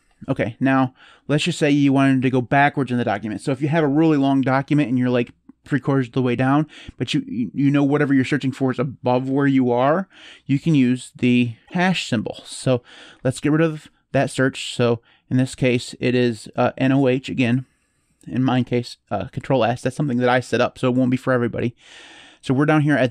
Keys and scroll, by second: 13.2 ctrl+s, 21.4-22.4 typing.